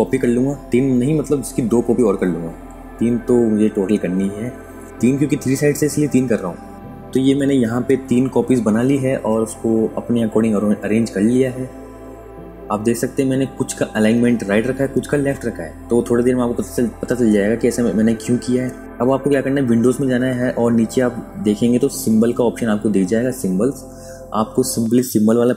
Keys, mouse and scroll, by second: 1.7 alt+click, 3.5 click, 5.3 click, 20.5 click.